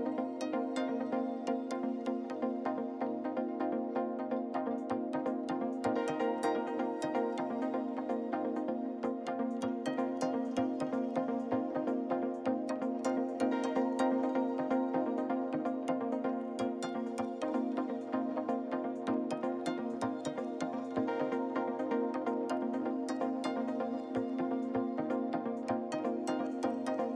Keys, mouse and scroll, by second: 2.8 n, 3.4-7.8 shift+middle drag, 7.8-8.1 scroll up 1, 8.1-12.9 middle drag, 12.9 n, 15.5-18.7 drag, 19.5-24.2 middle drag, 24.8-27.0 middle drag.